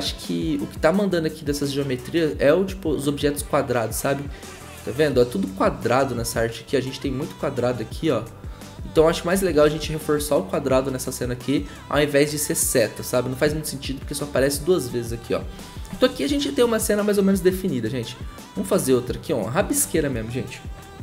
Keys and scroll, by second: 9.0 ctrl+z, 9.3 ctrl+z, 9.6 ctrl+z.